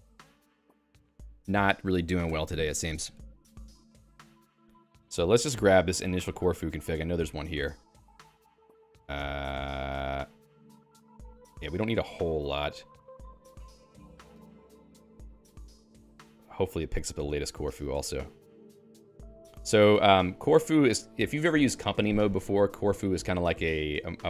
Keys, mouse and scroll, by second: 20.2 Escape.